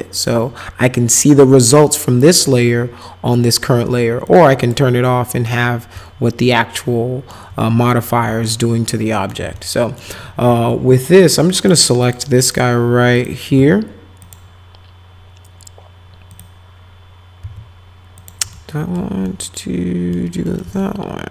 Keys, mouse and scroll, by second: 0.1 click, 4.3 click, 4.6 click, 6.0-7.3 alt+middle drag, 8.4 alt+right click, 9.6 alt+right click, 11.6 click, 12.0 click, 12.4 click, 13.2 click, 14.2 ctrl+click, 16.3 ctrl+click, 17.4 ctrl+z, 18.2 ctrl+click, 18.5 alt+middle click, 19.3 alt+middle click, 19.7 alt+right click, 20.4 right click, 20.8 alt+right click.